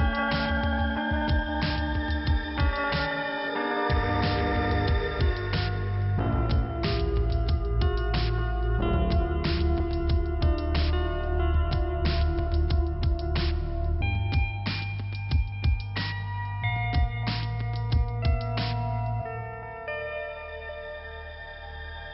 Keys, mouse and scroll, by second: 3.0 click, 5.7 click, 6.0 click, 7.8 middle click, 9.3 click, 12.4 click, 12.5 click, 13.7 click, 15.0 click, 15.1 click, 15.8 click, 16.4 click, 16.5 click, 17.5 click, 17.6 click, 18.0 click, 20.0 click, 20.1 click, 21.0 click, 21.4 click, 21.5 click, 21.7 double click.